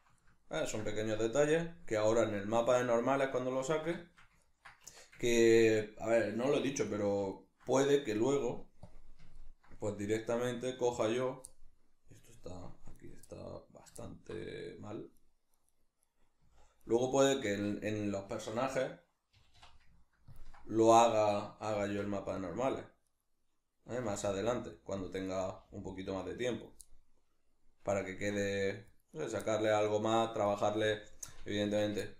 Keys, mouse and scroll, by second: 0.2-6.8 ctrl+middle drag, 4.8 Tab, 6.6 1, 6.8 right click, 7.3 shift+right click, 8.8 click, 9.4-11.2 ctrl+middle drag, 11.2 right click, 11.5-13.0 middle drag, 13.0 right click, 13.2-15.2 middle drag, 15.2 right click, 15.6 right click, 15.7 right click, 16.0 right click, 16.2 right click, 16.4 z, 16.8 right click, 17.4 z, 20.4 ctrl+click, 21.8 g, 22.5 click, 23.0 right click, 23.8 g, 25.0 click, 25.2 right click, 25.4 g, 26.6 click, 26.8-29.1 middle drag, 29.1 right click, 29.4-30.5 middle drag, 30.5 right click, 30.8 g, 31.4 click, 31.6 Tab, 32.0-32.1 ctrl+middle drag.